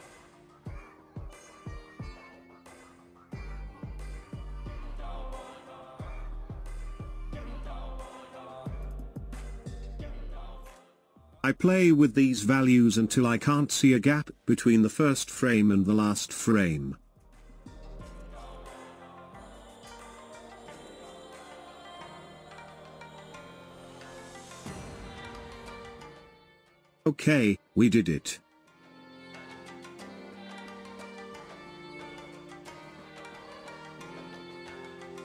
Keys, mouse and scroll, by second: 3.5-6.2 drag, 6.4-7.9 drag, 9.1-31.7 drag, 31.7-32.8 scroll down 11, 32.8-35.2 shift+middle drag.